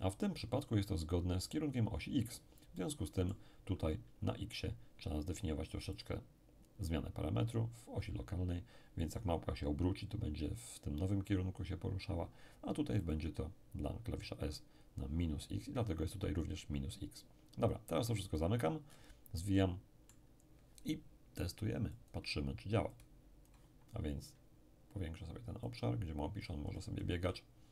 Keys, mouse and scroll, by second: 0.3-1.8 scroll up 1, 2.7-4.3 middle drag, 6.0 click, 13.0 click, 17.6-18.8 drag, 18.8-19.4 scroll down 1, 19.4 middle click, 20.3-21.2 scroll down 1, 21.2-21.9 scroll down 1, 21.9-24.4 drag, 25.6 click, 26.7-27.7 scroll down 1.